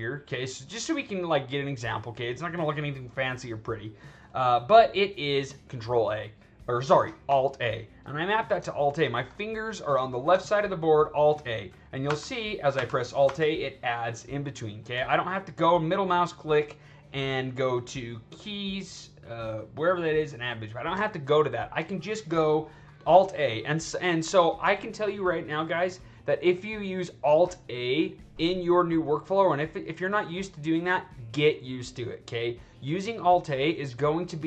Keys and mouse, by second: 0.3-4.8 drag, 12.0 alt+a, 12.7 alt+a, 13.2 alt+a, 15.5 right click, 21.0 alt+right drag, 23.3 click.